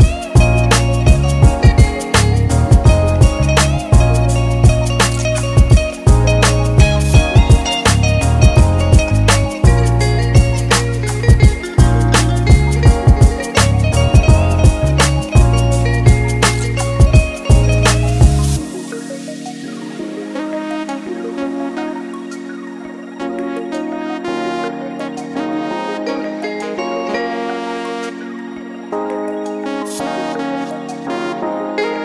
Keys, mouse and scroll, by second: 0.5 scroll down 2, 1.6 click, 2.6-3.1 scroll down 3, 2.9 middle click, 5.5 KP_1, 6.2 middle click, 8.3 shift+a, 10.5 click, 11.8 click, 12.3 click, 15.3 click, 16.4 click, 17.5 shift+middle click, 18.4 click, 19.1 Tab, 19.4 middle click, 20.4 click, 21.1 middle click, 22.0 click, 22.5-23.3 scroll down 1, 23.3 g, 28.0 middle click, 29.0-29.5 scroll down 2, 29.9 g.